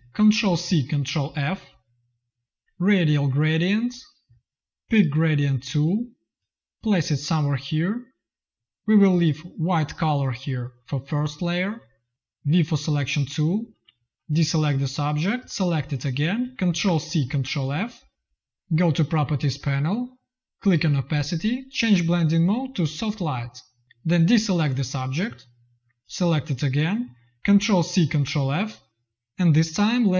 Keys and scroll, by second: 0.2 ctrl+c, 0.9 ctrl+f, 16.6 ctrl+c, 17.1 ctrl+f, 27.3 ctrl+c, 27.9 ctrl+f.